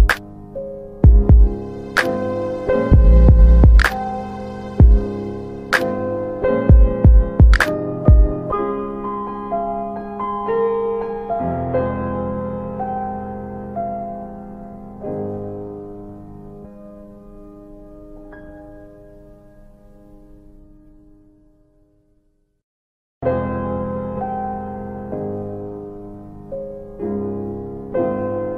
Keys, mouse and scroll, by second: 0.4 click, 0.8 alt+w, 1.0 alt+w, 1.6 z, 2.3 middle click, 2.3-3.7 scroll down 3, 3.8 middle click, 3.8-4.9 scroll down 2, 4.9 click, 7.7 scroll up 1, 8.0 middle click, 8.0 click, 8.4 click, 9.3 alt+w, 9.5 click, 9.8 alt+middle click, 10.3 middle click, 11.0 click, 12.2 alt+middle click, 12.5 click, 13.2 middle click, 13.2 click, 13.9 alt+middle click, 14.1 click, 14.8 click, 15.4-15.9 scroll down 1, 15.9 scroll down 1, 16.0 click, 16.2 ctrl+z, 16.7 q, 17.1 click, 17.9 w, 18.2 click, 19.5 middle click, 19.9 alt+middle click, 20.0 click, 20.6 click, 20.6 middle click, 21.9 alt+middle click, 21.9 click, 23.1 middle click, 23.5 click, 25.3 middle click, 25.5 alt+w, 26.1 alt+middle click, 26.5 scroll down 1, 26.6 middle click, 27.3 alt+middle click, 27.9-28.5 scroll down 1.